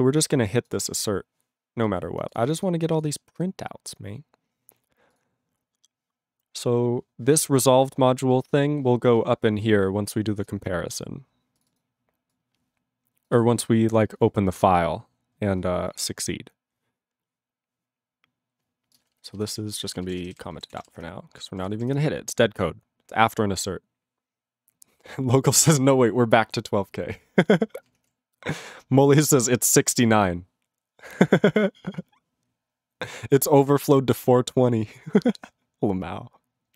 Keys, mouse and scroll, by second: 0.2 click, 0.7 click, 0.8 click, 0.9 click, 1.9 click, 2.0-2.3 scroll, 2.3 click, 2.3 click, 2.4 click, 2.5 click, 2.5 click, 2.6 click, 3.0 click, 3.1 click, 3.2 click, 3.4 click, 3.5 click, 3.9-4.8 scroll down 12, 5.1 click, 5.2 click, 6.3-6.8 scroll up 7, 7.2-8.4 scroll, 8.4 click, 8.4 click, 8.6 scroll up 1, 8.7-9.2 scroll, 9.2 click, 10.1 click, 10.4 click, 10.5 click, 10.8-11.6 scroll down 10, 11.6 click, 11.7 click, 11.7 click, 11.8 click, 12.3 click, 12.4 click, 13.3 click, 13.4 click, 13.4 click, 13.6 scroll up 1, 13.7-14.6 scroll, 14.6 scroll, 15.2-16.3 scroll, 16.3-19.0 scroll, 19.0 click, 19.0 click, 19.3 alt+b, 19.4 alt+b, 19.8 alt+f, 19.9 alt+f, 20.1 alt+b, 20.4 /, 20.4 /, 20.8 ctrl+s, 28.2 ctrl+s.